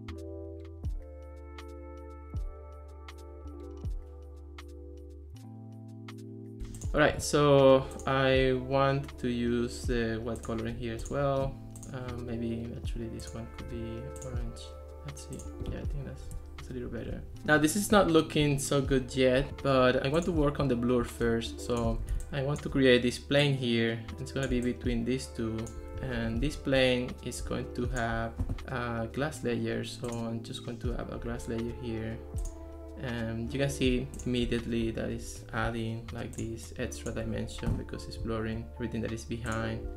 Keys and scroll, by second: 6.6 Escape, 26.2 alt+r.